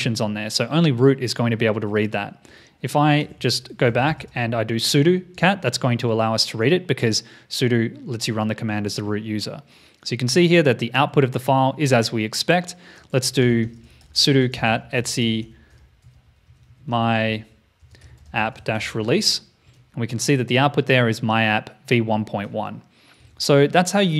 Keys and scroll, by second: 3.2 ctrl+a, 23.2 super+Tab.